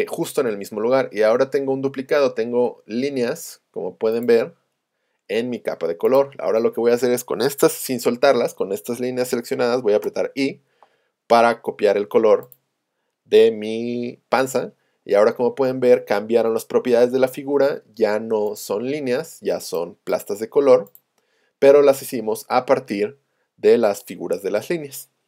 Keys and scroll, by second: 10.1 i.